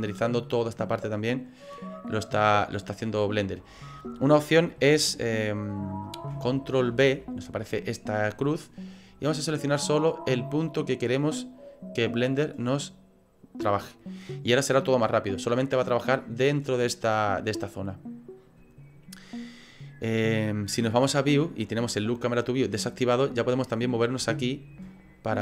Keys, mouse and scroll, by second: 6.9 ctrl+b, 21.0 click, 23.3 scroll up 3, 24.4 shift+middle click, 25.2-25.4 scroll up 6.